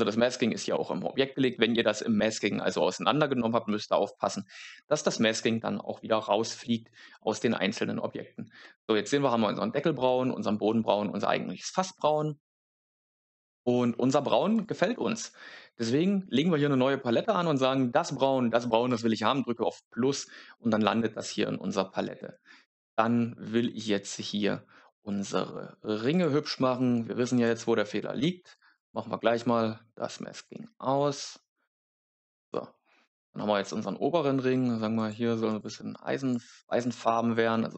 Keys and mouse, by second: 0.4 click, 8.6-14.5 middle drag, 14.5 click, 26.0 click, 27.3 click, 30.2 click, 32.3 click, 34.9 click, 35.4 click, 36.1 click, 36.6 click.